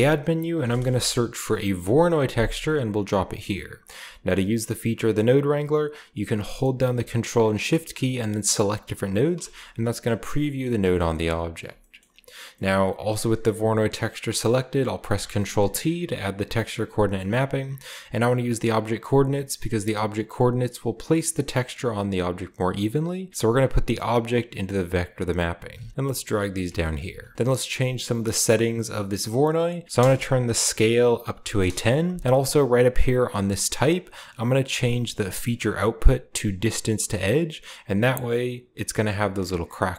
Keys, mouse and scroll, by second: 0.5 v, 0.5 o, 0.8 r, 1.8 Return, 3.4 click, 8.5 ctrl+shift+click, 10.3 click, 10.9-12.5 shift+middle drag, 11.0 shift+scroll up 2, 11.7-14.9 shift+scroll up 1, 12.6-14.9 middle drag, 15.0 ctrl+t, 15.9 a, 17.7-19.4 scroll up 1, 19.4-24.5 drag, 19.4-20.5 scroll up 1, 24.8 click, 25.4 click, 25.8-26.9 scroll down 1, 25.9 ctrl+g, 26.5-31.3 drag, 26.6-27.1 typing, 26.9-29.8 scroll up 1, 31.3-32.1 typing, 33.4 click, 36.6 click, 37.8 scroll down 1, 38.8 scroll up 1, 39.7 scroll up 1.